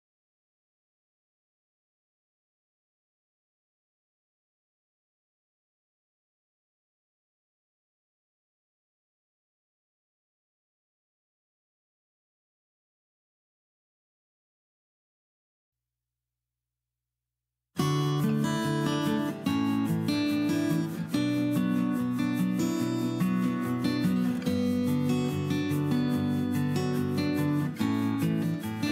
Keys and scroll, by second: 0.9 ctrl+c, 2.9 Escape, 2.9 p, 6.1 ctrl+g, 6.1 m, 7.9-9.5 typing, 9.0 Delete, 10.0 Delete, 12.8 ctrl+g, 13.7 ctrl+a, 15.7 Escape, 15.8 Escape, 16.1 Escape, 17.5 m, 19.2 m.